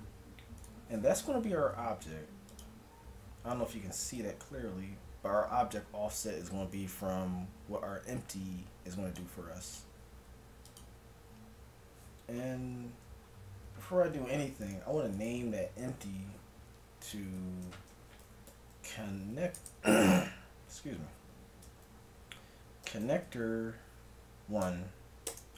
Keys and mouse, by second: 2.5-5.9 drag, 5.9 middle click, 9.7-11.5 drag, 13.0 middle click, 13.6 z, 17.0-18.7 drag, 18.6 n.